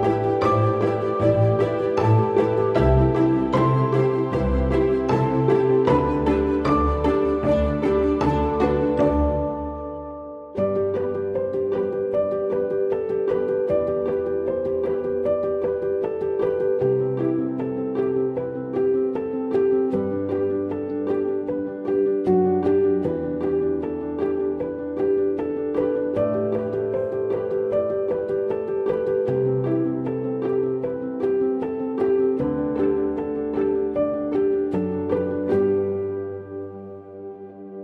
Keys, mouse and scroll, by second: 17.2 scroll down 1, 21.3 scroll down 1, 21.5-24.5 scroll up 1.